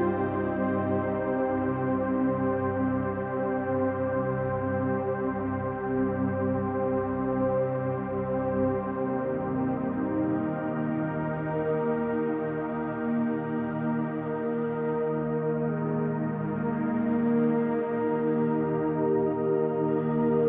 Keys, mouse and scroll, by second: 2.9-5.3 middle drag, 5.5-6.0 scroll up 1, 6.6 1, 8.6-9.5 drag, 16.7 n, 18.1 click, 18.9 click, 19.9 click, 20.0 typing.